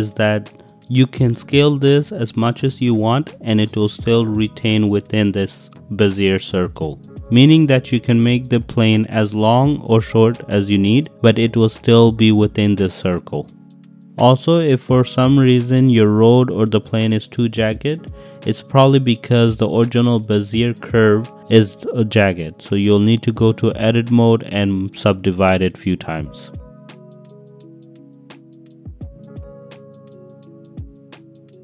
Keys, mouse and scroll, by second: 2.0 click, 2.6 g, 2.8 x, 7.8 click, 8.8 click, 9.3 s, 9.5 y, 11.2 g, 11.4 x, 15.1 click, 15.9 shift+`, 16.9-18.6 middle drag, 19.0-19.5 middle drag, 19.7 middle click, 20.1 click, 20.3 middle click, 21.5 shift+click, 22.1 click, 22.5-22.9 drag, 23.3 click, 23.7 click, 23.9 a, 24.2-24.7 drag, 25.1 click, 25.9 drag, 26.3-26.6 drag, 26.7 ctrl+z, 27.0 ctrl+z, 27.1 ctrl+z, 27.3 ctrl+z, 27.5 ctrl+z, 27.6 click, 27.9 click, 28.1 drag, 28.7 s, 30.5 x, 31.5 middle click.